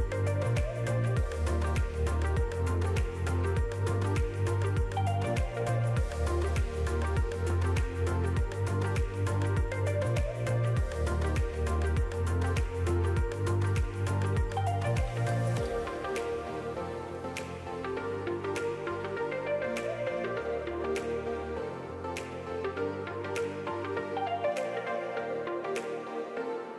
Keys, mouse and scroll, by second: 1.5-1.9 scroll up 1, 2.1 scroll up 1, 2.4-3.1 scroll down 2, 2.6 middle click, 4.9 shift+middle click, 6.0 middle click, 7.0-7.4 scroll down 5, 7.2 middle click, 7.5 shift+middle click, 7.7 scroll down 1, 8.1 shift+middle click, 9.1 shift+a, 11.3 KP_Decimal, 11.8-12.2 scroll down 4, 12.0 middle click, 14.5 click, 16.6 click, 18.9 middle click, 20.4 ctrl+r, 21.7 middle click, 22.6 ctrl+r, 23.6 middle click, 25.4 click, 25.8 middle click.